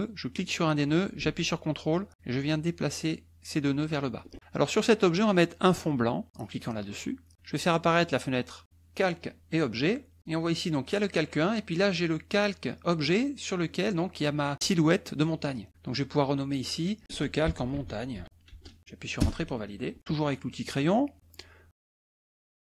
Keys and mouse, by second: 0.3-4.3 drag, 7.8 click, 10.0 click, 13.7 click, 16.5 click, 17.4-19.0 typing.